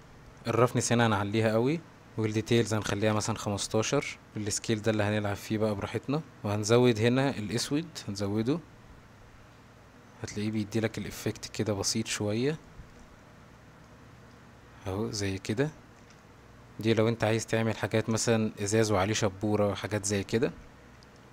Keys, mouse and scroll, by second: 0.0 shift+middle drag, 0.8 click, 2.3 click, 4.7-6.1 shift+drag, 7.8-10.6 drag, 10.9-12.4 middle drag, 12.7 shift+middle drag, 13.8 middle click, 16.2-16.7 ctrl+middle drag, 21.2-21.3 shift+drag.